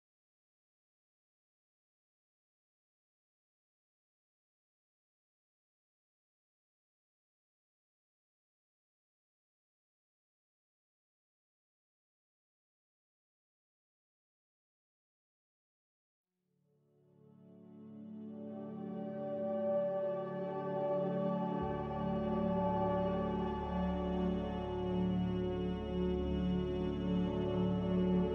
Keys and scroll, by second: 3.7-4.6 typing, 6.1-8.2 typing, 16.3-17.3 typing, 22.9 ctrl+z.